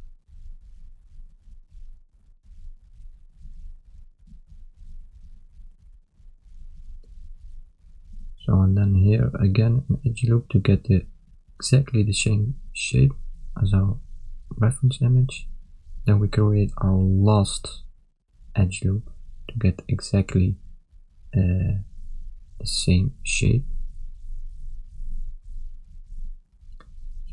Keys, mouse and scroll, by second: 22.2 s, 25.9 shift+middle click.